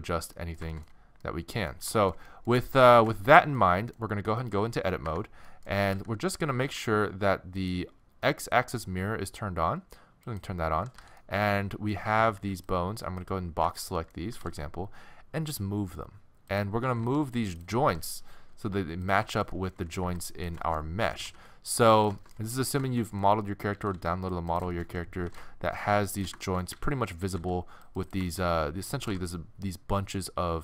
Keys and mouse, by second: 5.1 Tab, 5.9 a, 6.7 t, 10.3-12.1 drag, 11.0 a, 12.1-14.9 middle drag, 12.1 a, 12.4 b, 14.3 g, 16.8 a, 17.0 c, 17.8 g, 19.3 middle click, 19.8 a, 20.0 b, 21.1 g, 23.7 a, 23.9 c, 25.2 g, 26.7 a, 26.9 a, 27.2 a, 27.4 c, 29.0 g.